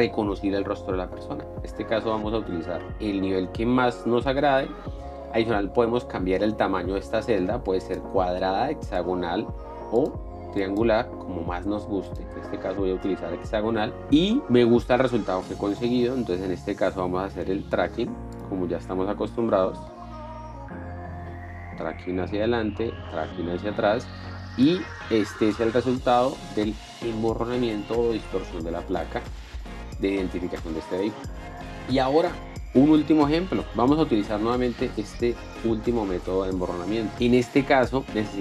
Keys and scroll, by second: 25.1 p, 25.5 space, 37.8 z.